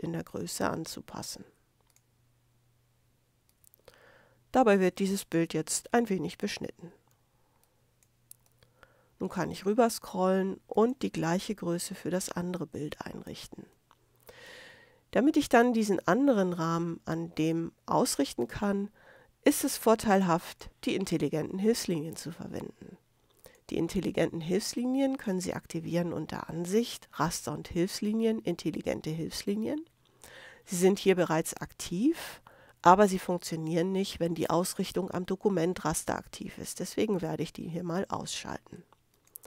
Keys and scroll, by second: 7.1 space, 11.8 super+-, 13.7 super+space.